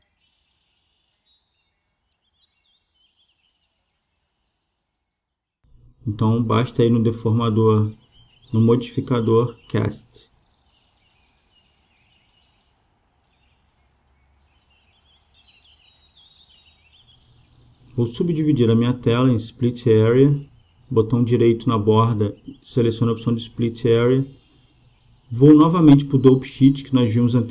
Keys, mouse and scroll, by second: 9.4-11.1 drag, 15.9-17.7 drag, 24.3-26.1 right drag, 27.2-27.5 drag.